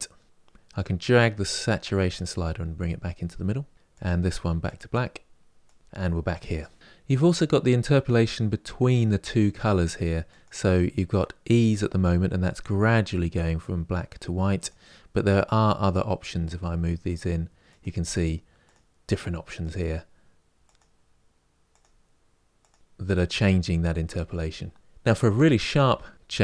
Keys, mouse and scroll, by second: 3.7 click, 5.4 click, 6.7-26.4 drag.